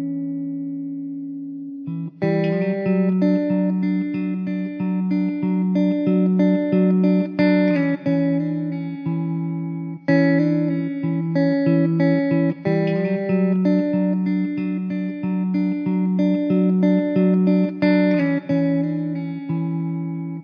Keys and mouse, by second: 16.7 alt+middle click.